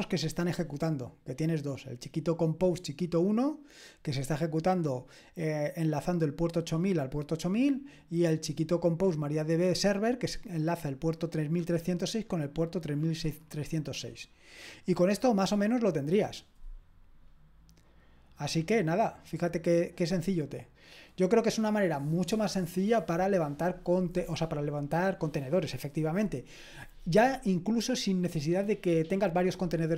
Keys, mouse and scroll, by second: 17.6-18.5 scroll down 1, 18.5-19.2 scroll down 1, 19.2-23.0 scroll down 1.